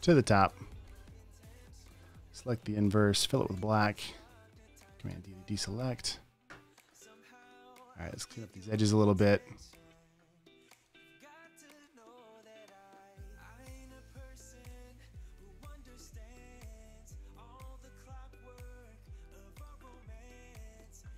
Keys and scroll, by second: 2.4 shift+super+i, 4.0 super+BackSpace, 5.2 super+d, 5.4 v, 7.1 space, 7.2 space, 8.7 super+space, 10.2 super+v, 11.1 super+v, 14.8-16.5 typing, 16.3 super+z, 19.6 space, 20.0 space.